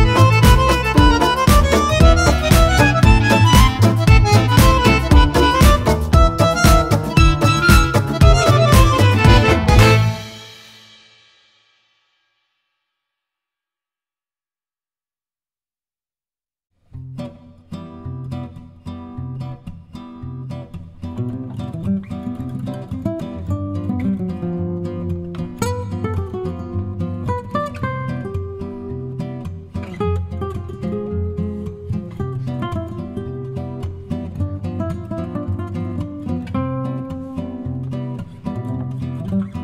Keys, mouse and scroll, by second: 2.1 shift+click, 3.2 click, 4.2-6.2 drag, 7.3-8.8 shift+drag, 9.6-12.1 drag, 13.3 click, 14.3 click, 15.7 shift+click, 16.1 shift+click, 16.8 shift+click, 19.3 click, 20.2-21.3 drag, 21.8-24.2 drag, 25.8 click, 29.7-37.5 shift+drag.